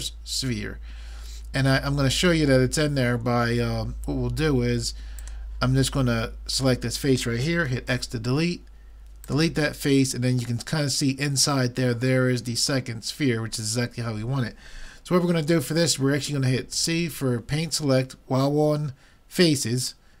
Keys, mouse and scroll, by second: 2.6-5.0 middle drag, 5.2-8.3 drag, 7.9 x, 16.8 c.